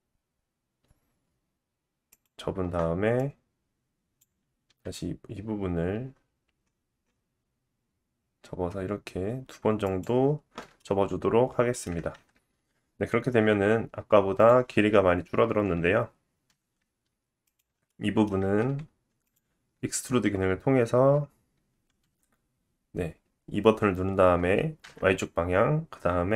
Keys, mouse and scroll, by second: 2.2 middle click, 3.1-9.9 drag, 4.6 g, 9.9-14.3 middle drag, 12.1 Tab, 14.3-17.5 drag, 15.2 g, 17.5-19.2 middle drag, 18.3 Tab, 19.2 alt+click, 19.3 alt+middle click, 22.0 e.